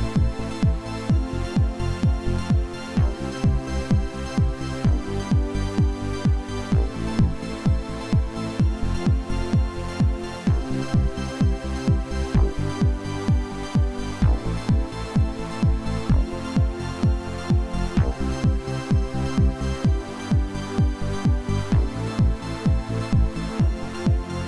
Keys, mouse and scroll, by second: 1.5 y, 1.6 scroll down 6, 1.8 middle click, 1.8 y, 2.4 space, 4.8 middle click, 5.1 y, 5.1 scroll down 4, 5.3-5.7 scroll up 6, 5.4 shift+middle click, 5.8 s, 12.2-18.4 typing, 12.4 middle click, 12.6 shift+middle click, 15.0 middle click, 15.2 shift+middle click, 15.4 shift+middle click, 15.7 middle click, 16.6 shift+middle click, 18.1 middle click, 21.7 scroll down 2, 22.0 middle click, 22.2 ctrl+z, 22.6-23.7 typing, 23.0 middle click, 23.9 shift+middle click, 24.4 double click.